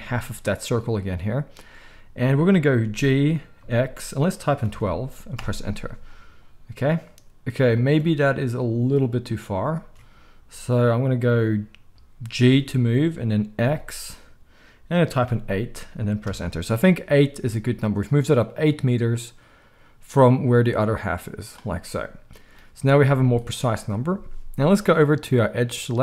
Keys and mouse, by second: 0.1-20.8 middle drag, 2.9 g, 9.7 ctrl+z, 12.5 g, 20.8-26.0 drag, 23.0 z.